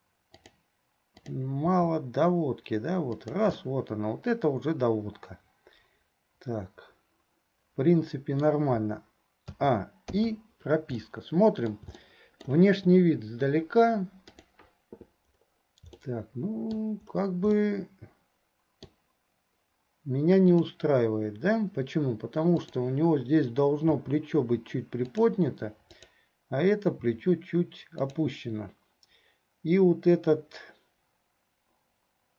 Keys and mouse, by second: 1.9 r, 3.7-8.8 middle drag, 9.7 a, 10.4 i, 11.0 middle click, 12.1 middle click, 14.5 click, 16.2 shift+middle click, 17.8-19.1 shift+middle drag, 20.6 click, 22.6 click, 24.0 r, 26.2 click, 27.2 r.